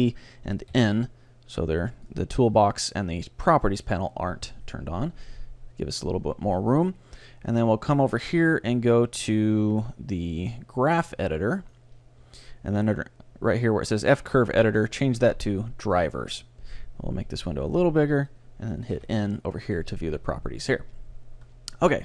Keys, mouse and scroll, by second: 0.8 n, 2.1-3.8 drag, 6.5-8.2 drag, 14.5-16.4 drag, 17.5-19.4 drag, 19.0 n.